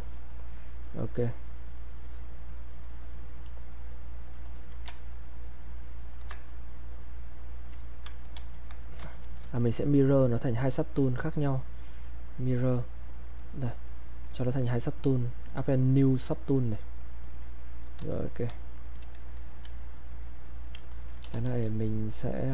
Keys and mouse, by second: 0.3 alt+click, 2.0-4.6 drag, 6.5-8.3 shift+drag, 8.3 ctrl+z, 8.9 click, 10.9 click, 17.0 click, 19.4 alt+click, 20.9 alt+click, 21.3 e.